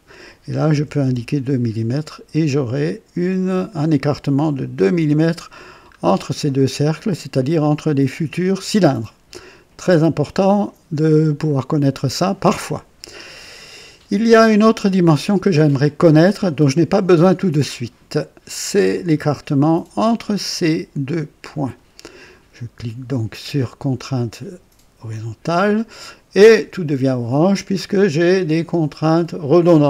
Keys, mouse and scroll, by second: 0.7 KP_2, 1.0 Return, 3.2-5.0 drag, 5.9 scroll up 1, 10.4-11.2 right drag, 14.7-15.4 right drag, 18.9 click, 21.4 click, 25.0 click.